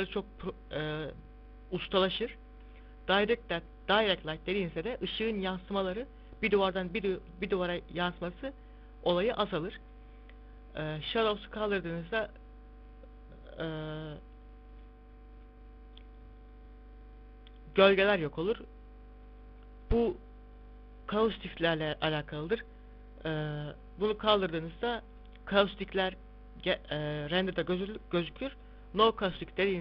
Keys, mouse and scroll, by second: 2.8 click, 11.4 click, 14.8 click, 19.2 click, 20.0 click, 23.5 click, 27.9 click.